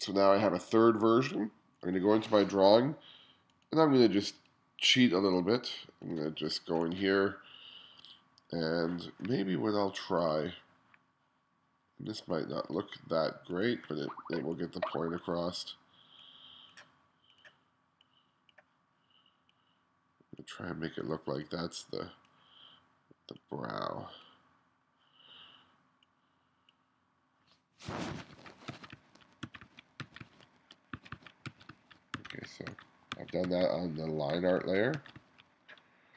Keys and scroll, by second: 28.0-35.0 typing.